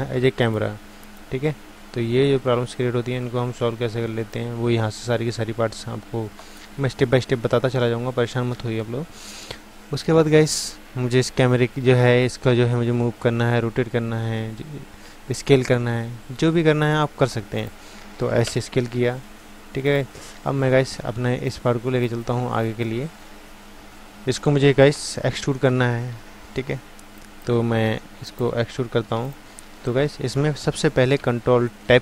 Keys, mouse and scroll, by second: 17.6-19.3 drag, 18.5 s, 21.5-28.9 drag.